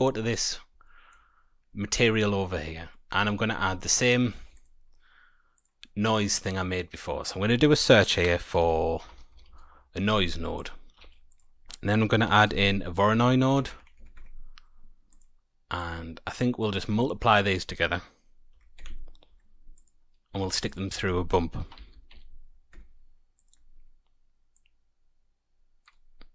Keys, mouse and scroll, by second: 0.1 middle click, 0.8 shift+middle click, 1.4-2.1 scroll up 8, 2.1 middle click, 2.5-3.7 scroll down 6, 2.9 middle click, 3.5 middle click, 4.3 shift+a, 10.9 shift+a, 13.5 Down, 13.7 Down, 13.9 Down, 15.7 click, 17.0 click, 19.7 click, 20.4 shift+a, 24.5 click.